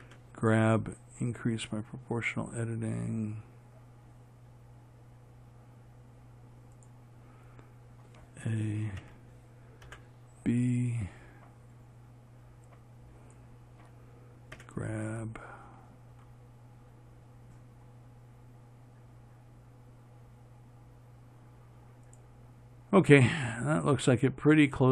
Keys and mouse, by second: 0.3 g, 9.3 a, 10.2 b, 14.8 g.